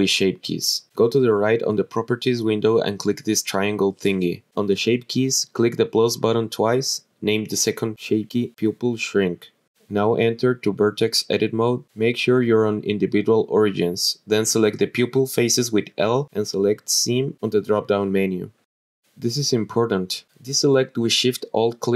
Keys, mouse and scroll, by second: 1.5 click, 2.7 click, 7.0 click, 7.6 click, 8.6-10.7 drag, 9.2 BackSpace, 10.7 click, 12.0 click, 12.7 click, 14.4-14.7 scroll up 4, 14.7 scroll down 1, 15.1 shift+middle click, 15.8 click, 16.9 l, 19.0 click, 19.6 scroll down 1, 19.9 shift+middle click, 21.8 alt+shift+click.